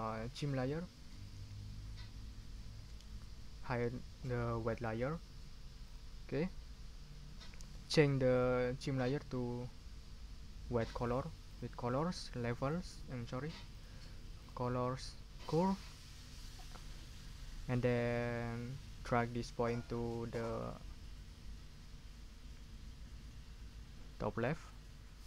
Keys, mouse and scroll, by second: 4.7 click, 5.8 click, 11.4 click, 12.5 click, 13.7 click, 14.4 click, 15.4 click, 19.7-24.9 drag.